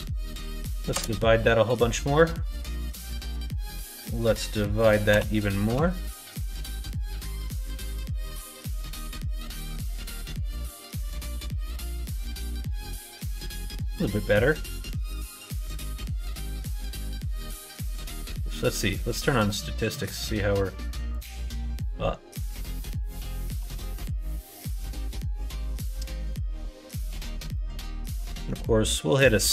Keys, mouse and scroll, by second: 3.1-10.1 drag, 11.4 middle click, 13.0 middle click, 16.6-24.1 drag, 25.0-27.2 drag, 27.5 middle click, 28.3 ctrl+s.